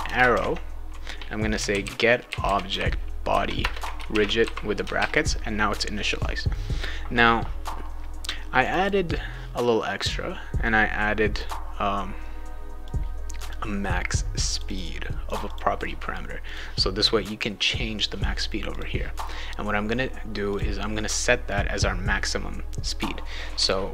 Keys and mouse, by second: 0.0-4.9 typing, 3.6 Return, 5.0 ctrl+s, 8.6 click, 8.8 click, 10.0-11.3 drag, 12.8 click, 14.5 click, 14.7 click, 15.3 click, 15.5 click, 16.4 click, 18.7 click, 20.5 click.